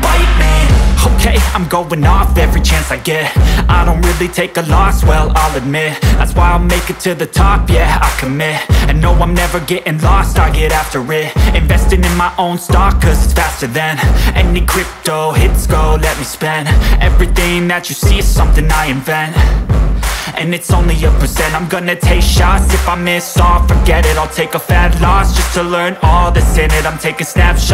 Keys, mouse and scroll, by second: 0.6 w, 2.1 1, 2.9 Return, 4.7 click, 7.2 click, 8.2 click, 13.2 click, 17.9-19.0 typing, 23.5 click, 25.3 click, 26.8 click.